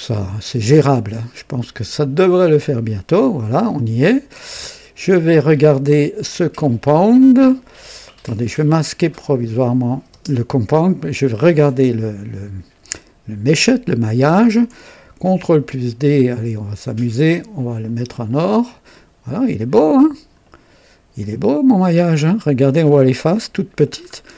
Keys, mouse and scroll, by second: 4.3-5.3 drag, 6.3 click, 9.0 click, 10.1 space, 11.0 click, 15.2 ctrl+d, 17.1 click, 17.8 click, 18.3 click, 18.9-20.5 drag, 21.2 click, 22.0-22.3 scroll up 1, 22.6 right click, 23.9-24.2 scroll down 1, 24.2 scroll up 1.